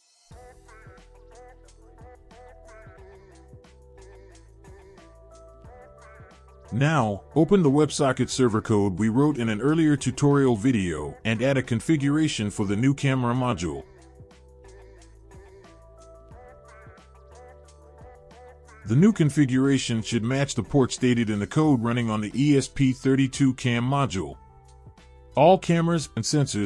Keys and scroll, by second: 9.6-11.2 typing, 12.3 Return, 15.4 Return, 16.0 BackSpace, 16.3 ctrl+v.